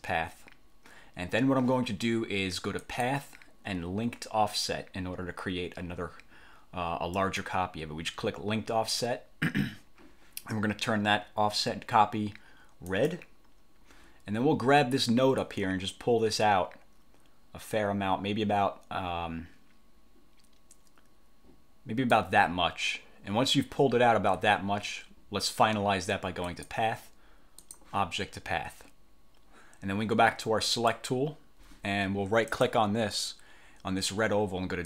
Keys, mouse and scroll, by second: 2.9 click, 7.3 click, 13.0 click, 15.5-22.4 drag, 26.6 click, 27.7 click, 30.9 click, 32.7 click.